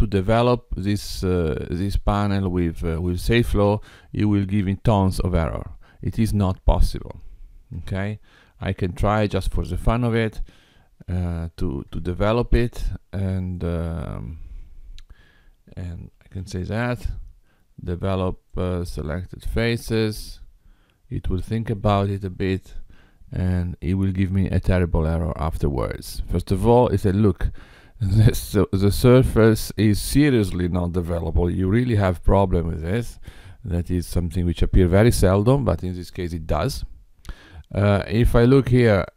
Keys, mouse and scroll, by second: 7.8 Tab, 9.3 click, 12.0 Tab, 13.5 click, 16.2 a, 18.5 click, 38.8 click.